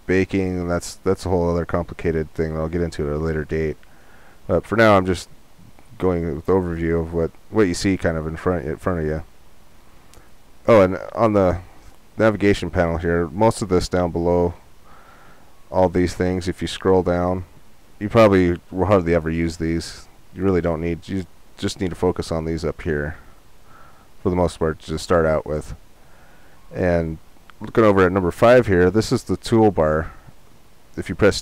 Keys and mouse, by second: 13.8-31.4 middle drag.